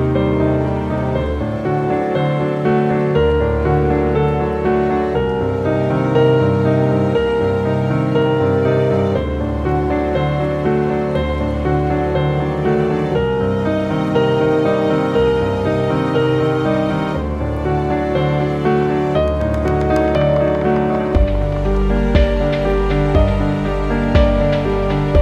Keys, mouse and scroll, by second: 1.0 ctrl+d, 1.6 click, 2.4 ctrl+t, 3.0 click, 3.3 right click, 4.2 click, 4.9 ctrl+t, 5.6-8.1 drag, 10.3 alt+click, 11.9-14.6 alt+drag, 16.8 click, 17.6 scroll down 1, 18.0 scroll up 1, 18.4-19.0 scroll down 1, 19.3 ctrl+g, 20.1-23.4 drag, 23.4 click, 24.9 shift+Up.